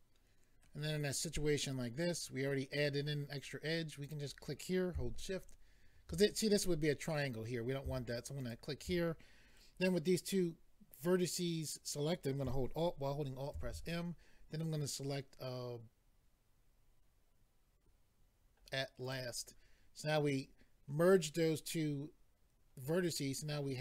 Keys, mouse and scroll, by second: 4.0 click, 8.4 shift+click, 13.5 alt+m, 19.0 click.